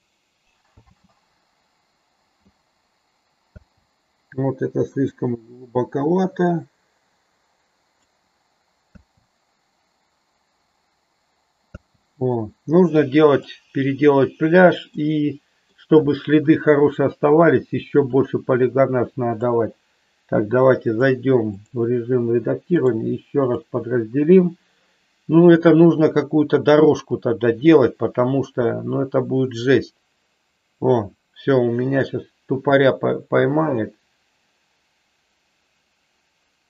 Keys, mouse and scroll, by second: 0.9 space, 3.8 space, 5.1-8.3 drag, 8.9 space, 11.9 space, 13.4-14.3 shift+middle drag, 15.2 middle click, 19.5 click, 20.9-21.9 drag, 22.8-24.0 right drag, 27.1-36.6 drag.